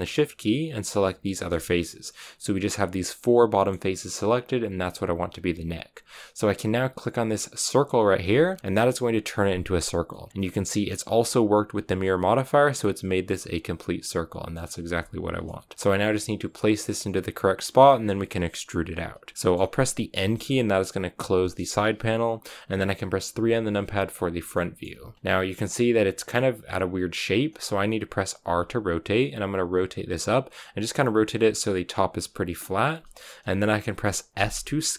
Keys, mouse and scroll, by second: 1.3 scroll down 2, 1.5-8.2 middle drag, 8.2 click, 8.6 middle click, 8.7-10.0 scroll up 1, 10.0 middle click, 10.2-13.9 scroll up 1, 13.9-20.1 middle drag, 20.1 n, 21.3-23.4 middle drag, 23.4 KP_3, 24.5-27.4 shift+middle drag, 27.4-28.4 scroll up 1, 28.4 r, 34.3 s.